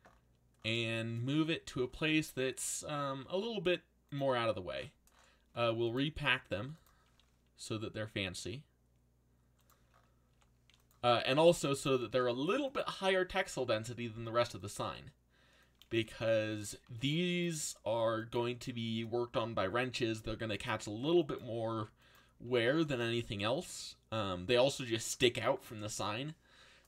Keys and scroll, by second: 3.1 g, 8.2 s, 10.3 g, 11.1 s, 12.0 g, 13.0 s, 14.8 g, 16.0 s, 16.8 g, 17.6 s, 18.4 g, 20.8 g, 21.6 g, 22.4 a.